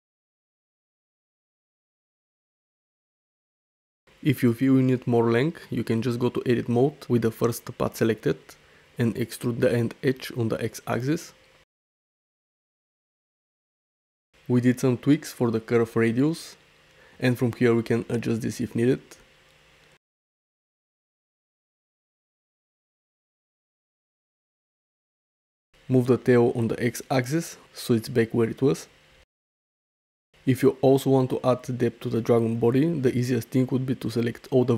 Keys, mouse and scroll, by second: 0.0 g, 0.8 g, 2.0-3.2 typing, 6.9 Tab, 8.0 middle click, 8.7 shift+middle click, 9.3 shift+middle click, 9.7 middle click, 10.3 click, 11.2 e, 12.1 x, 13.8 shift+middle click, 14.5 n, 16.2 click, 17.8 click, 19.2 click, 21.1 click, 22.8-23.8 drag, 25.8 g, 26.0 x, 28.1 `, 28.6-28.9 drag, 29.1-29.4 shift+middle drag, 29.6-30.3 middle drag, 33.2 middle click, 34.5 shift+middle click.